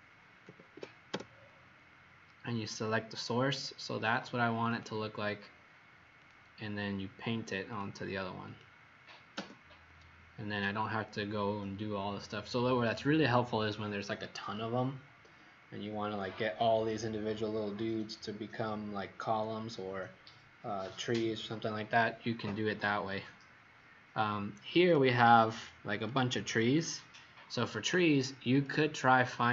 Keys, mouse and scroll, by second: 0.2-1.1 typing, 4.6 click, 22.6-23.1 scroll down 2.